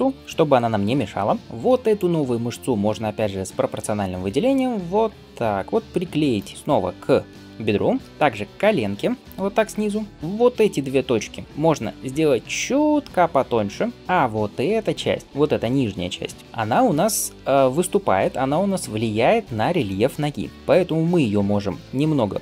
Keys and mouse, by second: 1.4 middle click, 1.8 click, 1.9-11.5 middle drag, 4.2 g, 8.1 g, 11.5-13.9 alt+drag, 11.6 alt+s, 13.9-22.4 middle drag, 13.9 g, 16.4 KP_1, 21.4 alt+s.